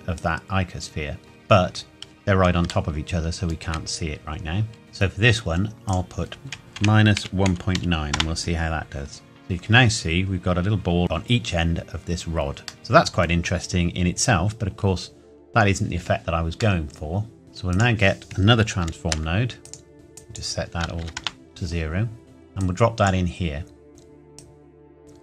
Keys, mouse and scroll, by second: 0.1 click, 2.9 shift+middle click, 4.3-5.8 scroll up 1, 5.8 click, 6.7 KP_Subtract, 7.2 KP_1, 7.5 KP_Decimal, 7.7 KP_9, 8.1 KP_Enter, 9.8 scroll up 1, 9.9-11.0 scroll down 1, 12.8 middle click, 13.2-15.4 scroll down 1, 16.6 shift+Num_Lock, 16.6 scroll down 1, 16.8 shift+middle click, 17.4-17.7 scroll up 1, 17.7 click, 18.8 shift+d, 19.6 click, 21.0 KP_0, 21.2 KP_Enter, 22.6 click, 24.3 click.